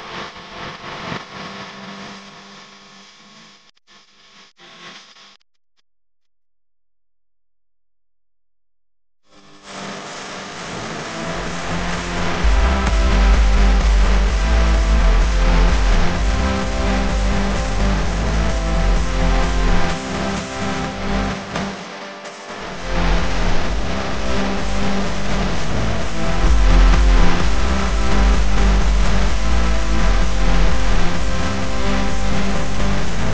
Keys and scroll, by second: 0.0-0.2 typing, 0.7 alt+super+space, 0.8 alt+super+space, 0.8 alt+super+space, 0.9 alt+super+space, 1.1 alt+super+space, 1.6 alt+super+space, 1.8 alt+super+space, 1.9-3.0 alt+super+space, 2.6-4.3 super+space, 4.3 Left, 5.6 Left, 6.6-7.4 typing, 8.4 Left, 9.3 space, 9.9 alt+super+space, 10.0 alt+super+space, 10.0 alt+super+space, 10.3 alt+super+space, 10.5 alt+super+space, 11.0-11.8 alt+super+space, 11.5 super+space, 11.5 super+space, 11.6 super+space, 11.7 super+space, 11.8-12.3 super+space, 12.5 super+space, 13.0 alt+super+space, 13.2 alt+super+space, 15.4 space, 15.9 alt+super+space, 15.9 alt+super+space, 16.0 alt+super+space, 16.1 alt+super+space, 16.4 alt+super+space, 16.9 super+space, 16.9 super+space, 17.0 super+space, 17.1-17.5 typing, 17.5 super+space, 17.7 super+space, 17.8 super+space, 18.0-19.4 super+space, 19.4-22.3 typing, 21.3 alt+super+space, 23.5-23.8 typing, 24.4 alt+super+space, 24.5 alt+super+space, 24.5 alt+super+space, 24.6 alt+super+space, 24.7 alt+super+space, 24.8 alt+super+space, 24.9 alt+super+space, 25.1 alt+super+space, 25.6 alt+super+space, 26.4 alt+super+space, 27.0 alt+super+space, 27.1 alt+super+space, 27.3-27.6 alt+super+space, 29.0 Left, 29.6 Left, 30.0 Left, 30.2 Left, 30.4 Left, 30.5 Left, 32.0-33.3 typing.